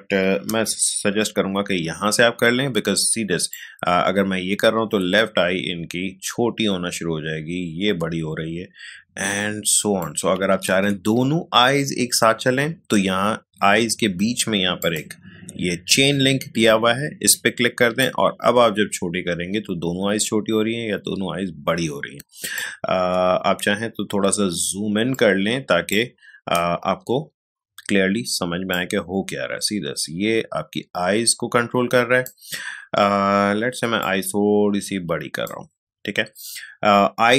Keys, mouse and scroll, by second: 0.9 ctrl+z, 3.5-10.7 drag, 10.7 ctrl+z, 14.8 click, 18.0-23.6 drag, 23.6 space, 25.1-28.7 ctrl+drag, 28.7-37.3 drag.